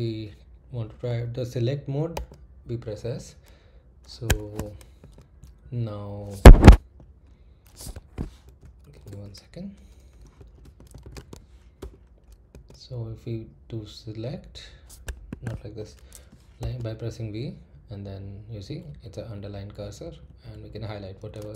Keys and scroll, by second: 2.1 s, 4.2 Escape, 5.0 s, 5.4 Left, 6.4 Escape, 7.9 Escape, 8.9 shift+;, 9.1 Return, 10.5-12.5 typing, 11.8 Return, 15.3 Escape, 16.6 v, 18.0 Left, 18.6-19.8 typing, 20.0 Left.